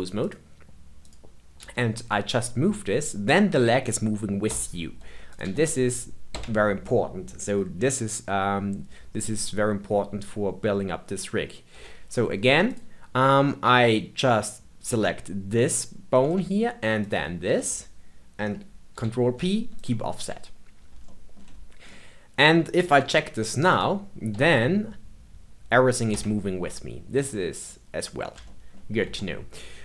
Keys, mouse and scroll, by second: 0.2 click, 1.0 click, 1.5 g, 5.2 click, 5.3 g, 11.7 Tab, 12.6 click, 17.0 shift+click, 18.9 ctrl+p, 21.0 shift+middle click, 21.4-21.8 scroll down 3, 21.8 middle click, 22.8 Tab, 23.6 click, 24.3 g, 27.4-28.4 scroll up 1, 28.4-29.0 shift+middle drag, 29.0 Tab, 29.4-29.8 scroll down 1.